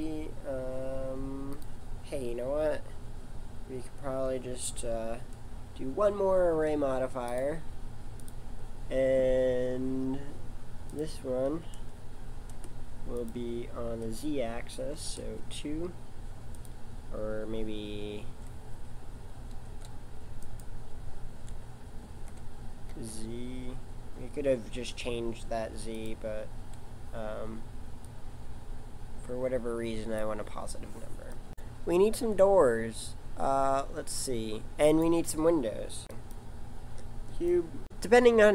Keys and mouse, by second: 7.3 click, 10.9 click, 13.1 click, 21.3 g, 28.1 click, 36.0 shift+a.